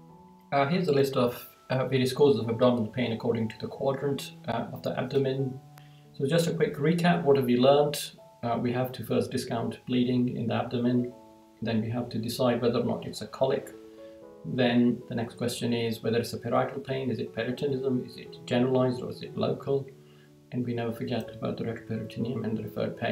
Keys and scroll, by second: 5.7 Right, 7.5 Right, 10.7 Right, 13.1 Right, 19.4 Right, 22.8 Right.